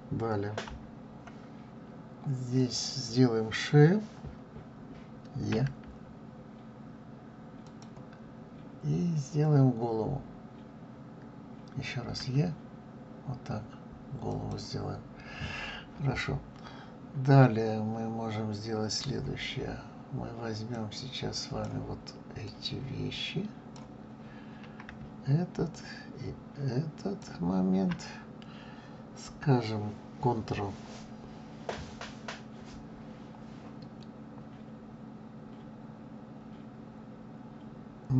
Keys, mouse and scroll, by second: 0.6 KP_3, 2.5 click, 5.5 e, 8.4-9.0 scroll down 4, 12.2 e, 16.2-16.9 scroll down 1, 16.9-19.0 scroll up 3, 20.7-22.5 drag, 25.7 shift+click.